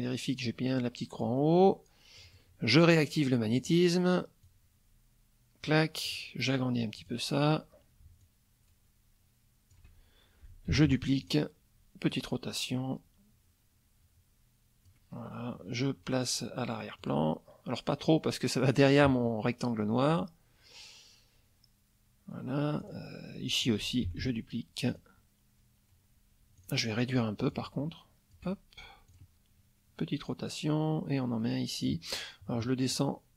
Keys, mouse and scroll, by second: 1.2-2.5 drag, 3.6 click, 4.4-5.8 drag, 6.0 click, 7.0 click, 8.2-9.9 shift+drag, 10.7 ctrl+d, 11.2 ctrl+click, 12.1-15.0 drag, 17.0 click, 20.1 click, 22.8 click, 24.0 ctrl+d, 24.9 click, 26.6 click, 27.5-28.5 shift+drag, 29.1 click, 30.3-32.1 drag, 32.9 click.